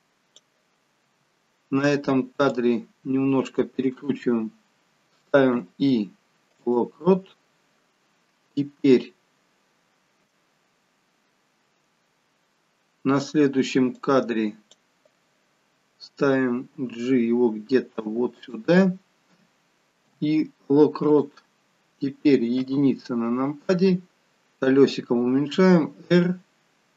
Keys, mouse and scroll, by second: 1.3 r, 5.5 i, 14.0 click, 16.7 g, 20.0 i, 22.6 KP_1, 23.7-24.2 scroll down 3, 25.5 r.